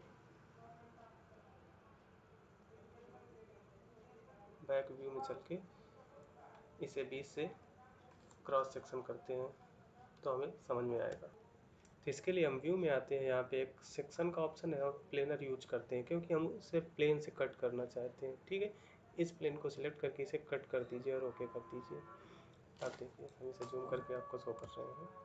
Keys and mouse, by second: 21.6 middle click, 23.2 middle click, 24.6 ctrl+middle click.